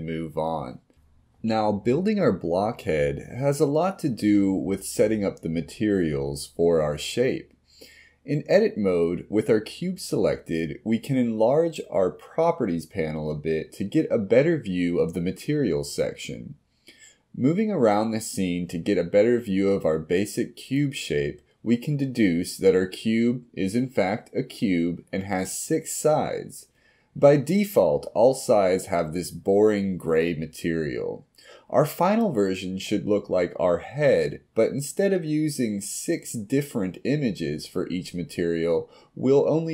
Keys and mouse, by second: 11.5-14.6 drag, 17.1 middle click, 18.0 middle click, 19.9 KP_1, 25.9 middle click, 29.6 click.